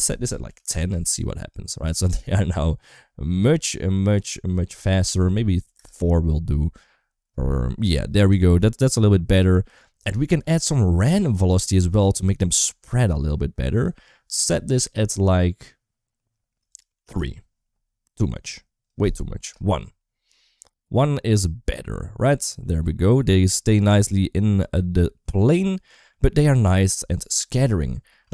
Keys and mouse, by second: 0.7 space, 1.8-3.1 shift+middle drag, 4.7 click, 8.2 shift+middle click, 8.9 middle click, 13.6-16.9 drag, 18.6 click, 22.5-25.9 middle drag, 26.4 middle click, 27.3 space, 27.9 space.